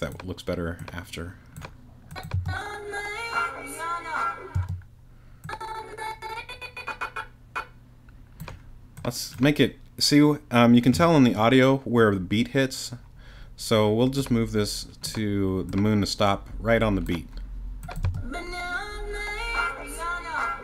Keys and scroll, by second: 2.3 space, 4.5 space, 18.0 space.